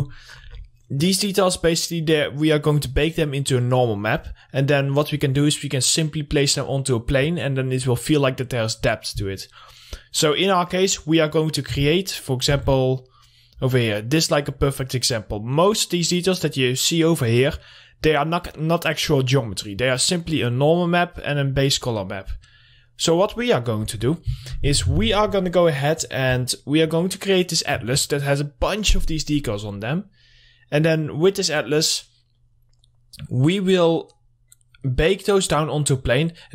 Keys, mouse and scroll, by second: 10.1 click, 11.2 scroll down 1, 12.1 Right, 14.0 scroll up 1, 14.4 click, 14.8 scroll down 1, 15.9 scroll up 1, 17.2 click, 22.4 click, 23.0 scroll down 1.